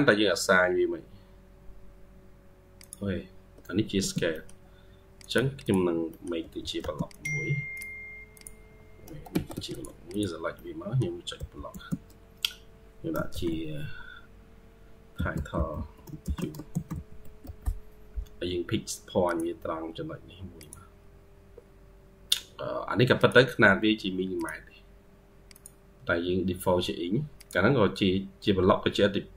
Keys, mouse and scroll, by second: 3.8 typing, 4.0 scroll up 1, 4.2 middle click, 4.7-5.1 scroll down 1, 5.5 double click, 5.9 middle click, 6.3 typing, 9.2 Escape, 9.4 Escape, 10.0 double click, 10.4 middle click, 11.2 typing, 15.4-17.8 typing, 27.9-28.9 scroll up 4, 28.1-28.9 typing.